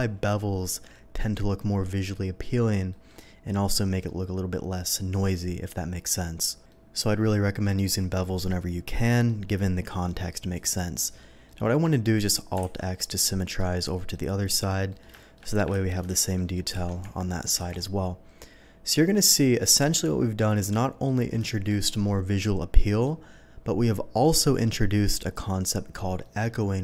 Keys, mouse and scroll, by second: 2.9 middle click, 3.3-4.0 scroll down 1, 4.0 middle click, 6.7 middle click, 8.2-9.2 middle drag, 10.5 click, 11.0 middle click, 11.4 middle click, 12.6 alt+x, 13.1 middle click, 13.8 scroll up 1, 14.1 middle click, 14.9 middle click, 15.1 shift+middle click, 15.7 ctrl+z, 16.3 middle click, 17.0 alt+a, 17.0 Tab, 17.6 alt+a, 17.7-18.9 middle drag, 19.4 shift+middle drag, 19.9-20.3 shift+middle drag, 20.7-21.0 shift+middle drag, 21.4 shift+middle drag, 22.9 shift+middle click, 24.2 shift+middle click, 26.2 middle click.